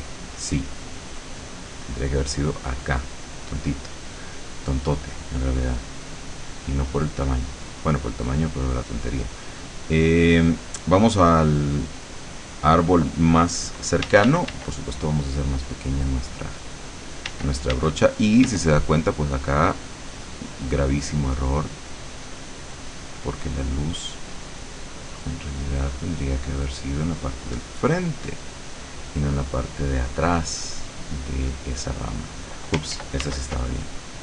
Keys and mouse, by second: 1.2 click, 2.1 click, 3.4 click, 5.2 click, 8.7 click, 10.1 click, 12.3 click, 14.1 d, 17.4 d, 18.6 d, 19.2-23.4 drag, 25.0-26.8 drag, 27.2-28.7 drag, 30.5-32.6 drag, 33.1 ctrl+z, 33.4 ctrl+x.